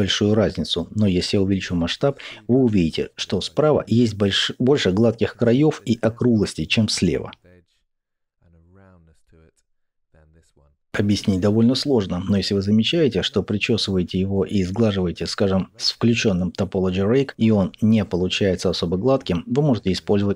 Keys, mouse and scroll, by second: 0.2 click, 0.8-15.0 middle drag, 15.0-17.2 drag, 17.2-18.6 middle drag, 18.6 click, 19.4 middle click, 20.1 click.